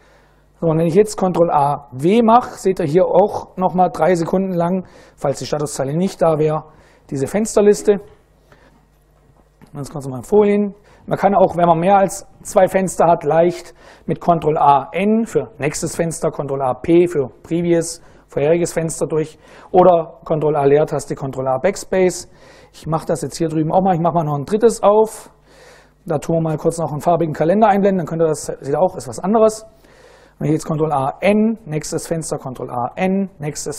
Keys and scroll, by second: 1.2 ctrl+a, 1.7 ctrl+w, 22.7 super+Right, 24.5 ctrl+a, 24.7 ctrl+c, 25.8-27.0 typing, 30.3 ctrl+a, 30.7 n, 31.7 ctrl+a, 32.5 n.